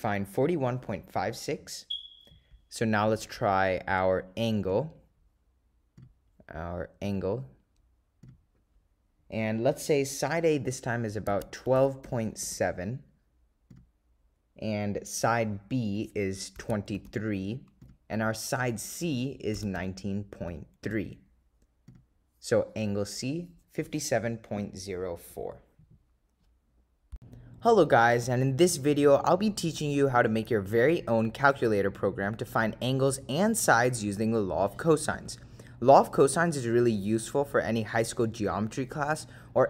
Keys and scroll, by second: 4.8 Return, 6.1 Return, 7.2 Down, 8.3 Return, 11.4-13.1 typing, 13.8 Return, 16.8-17.6 typing, 17.9 Return, 19.6-21.5 typing, 22.0 Return.